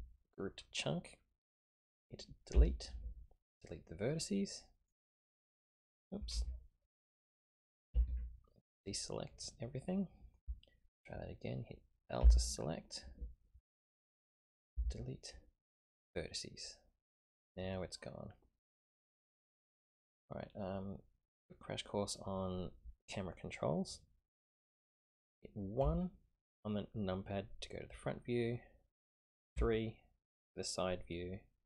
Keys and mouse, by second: 2.1 typing, 2.5 Delete, 6.3 ctrl+z, 6.7-7.5 middle drag, 7.5 click, 7.9 a, 8.1 a, 10.0-10.4 drag, 11.1 typing, 12.2 l, 14.7 Delete, 15.2 typing, 16.9-19.2 middle drag, 20.3-22.2 middle drag, 25.8 KP_1, 29.5 KP_3.